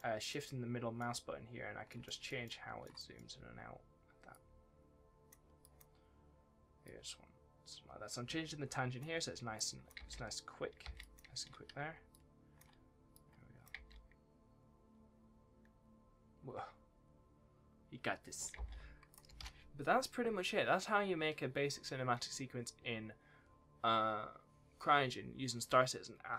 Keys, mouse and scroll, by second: 2.0 middle click, 2.4 shift+middle click, 3.1-4.3 scroll up 1, 4.3 click, 9.5 click, 9.9 space, 10.9 click, 12.1 shift+click, 13.1 click, 13.7 space, 18.5 space, 19.1 click, 19.3 ctrl+s.